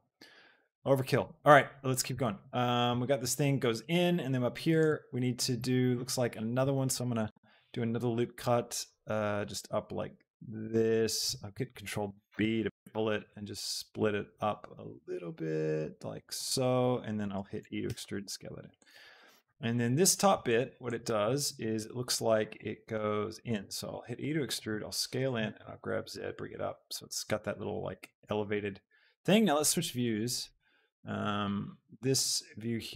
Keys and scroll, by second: 4.8 shift+Tab, 7.5 ctrl+r, 17.5 e, 17.9 Escape, 18.2 s, 23.7 e, 24.1 Escape, 24.5 s, 25.6 z.